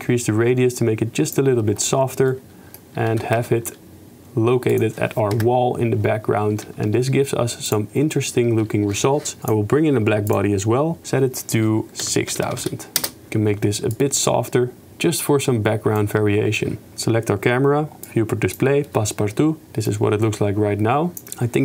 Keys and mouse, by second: 0.0 shift+click, 0.1-1.4 shift+middle drag, 2.5 middle click, 3.2 r, 5.3 KP_0, 6.7 g, 9.5 ctrl+z, 9.5-10.4 drag, 11.1-13.1 drag, 12.6 0, 12.7 0, 13.9 shift+click, 14.3 shift+middle click, 15.1 shift+click, 15.4 shift+middle click, 18.2 click, 19.8 shift+middle click, 21.1 click.